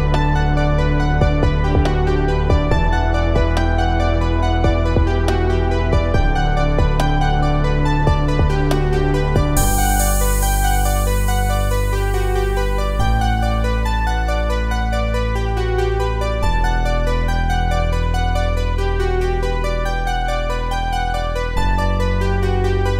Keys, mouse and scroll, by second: 1.1 click, 4.1-10.9 drag, 11.2 click, 15.2 click, 19.3 click.